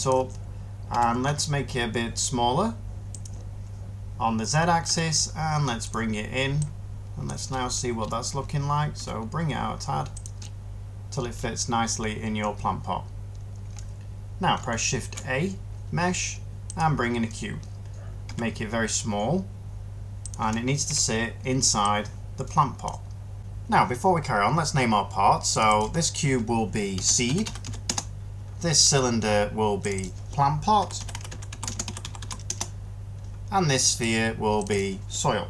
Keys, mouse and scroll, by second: 0.8 s, 1.1 z, 4.8 s, 8.9 s, 14.9 a, 18.2 s, 20.8 1, 26.9-27.5 typing, 27.8 Return, 30.4-32.9 typing, 35.3-35.4 typing.